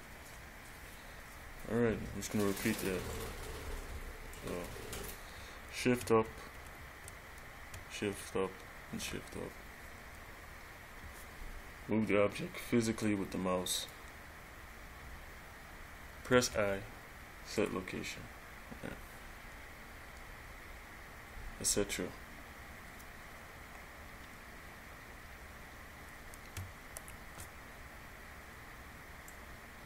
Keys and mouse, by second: 3.4 click, 6.8 shift+Up, 13.2 click, 16.5 i, 27.1 shift+Up, 29.5 click.